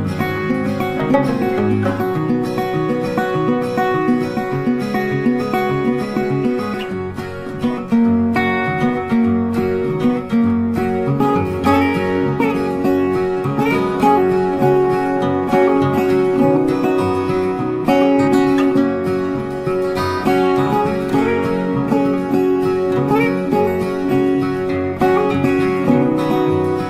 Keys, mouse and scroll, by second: 1.9 ctrl+click, 2.6 scroll down 1, 2.8 space, 4.0 alt+scroll up 1, 4.6 alt+scroll up 1, 5.0 ctrl+click, 6.2 ctrl+click, 7.0-7.7 scroll down 1, 8.5 ctrl+click, 9.9 ctrl+click, 11.0 ctrl+click, 12.1 scroll down 1, 12.4 ctrl+z, 13.4 ctrl+click, 15.2 ctrl+click, 16.6 ctrl+click, 17.0 scroll down 1, 21.5 Delete, 22.4 i, 23.1 ctrl+click, 23.7 Delete, 24.6 ctrl+click, 25.1 Delete, 25.7 ctrl+click, 26.5 Delete.